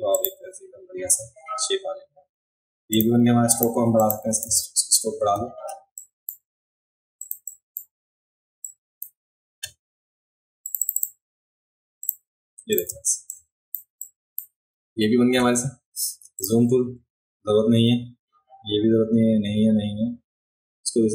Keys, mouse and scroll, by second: 0.2 click, 3.0 click, 3.6 click, 4.0 click, 4.5 v, 6.0 drag, 7.2 click, 7.5 drag, 8.7-9.0 drag, 10.7 click, 10.8 click, 12.0 click, 12.7 click, 13.2 space, 13.3 click, 14.1 click, 16.4 click.